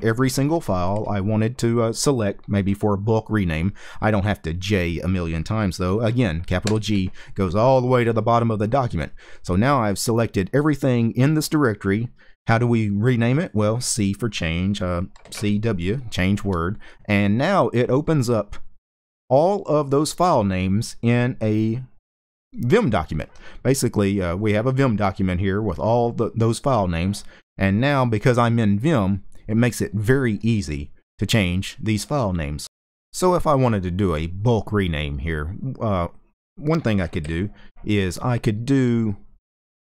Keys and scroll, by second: 15.0-15.7 typing, 36.7 g, 36.9 g.